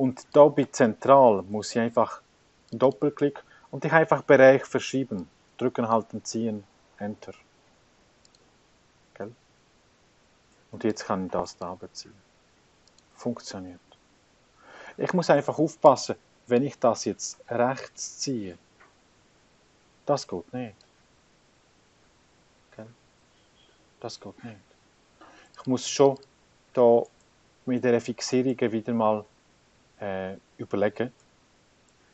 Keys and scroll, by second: 7.0 Return.